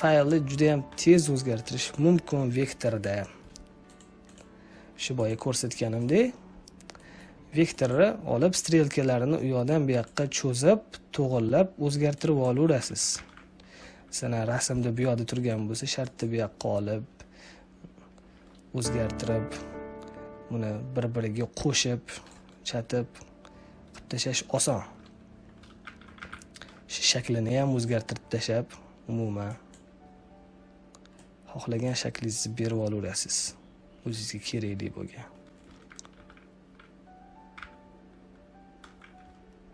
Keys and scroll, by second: 12.7 ctrl+z, 13.7 space, 25.7 ctrl+z, 36.0 ctrl+z, 37.4 z.